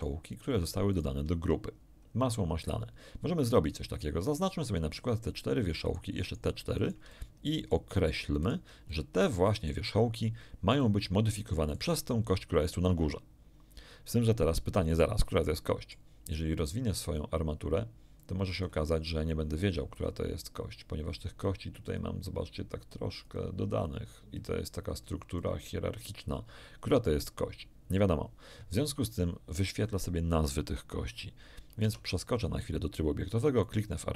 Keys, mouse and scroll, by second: 0.3 shift+right click, 0.9 shift+right click, 1.9-2.5 shift+scroll up 2, 4.0-4.3 scroll down 2, 5.8 shift+right click, 6.2 shift+right click, 6.7 shift+right click, 7.1 shift+middle click, 8.4 shift+right click, 8.9 shift+middle click, 10.7-11.9 middle drag, 14.4-16.1 middle drag, 18.1 click, 19.9 click, 21.8 click, 23.2 click, 24.3 click, 25.3 click, 31.8 Tab, 33.6 right click.